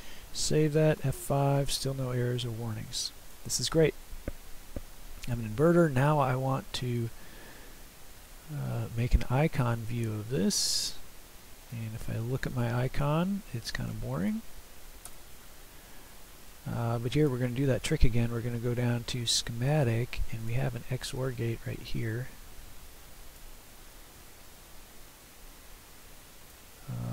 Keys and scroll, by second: 0.7 F5, 15.1 Delete.